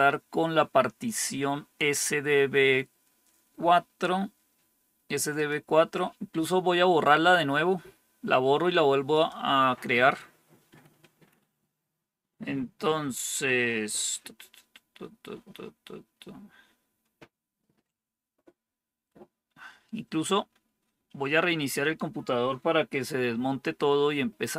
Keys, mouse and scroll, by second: 5.3-6.3 drag, 9.0-10.1 drag.